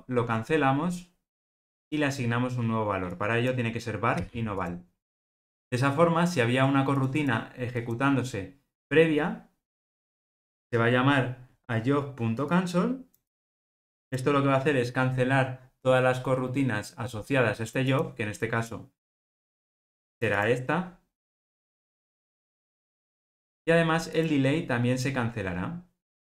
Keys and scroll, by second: 24.1 super+b, 24.6 super+b.